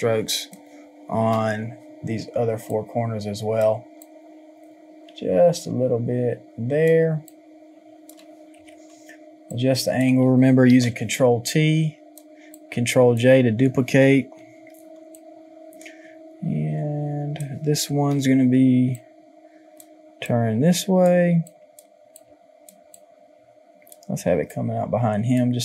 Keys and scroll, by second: 8.6 Return, 18.1 ctrl+t.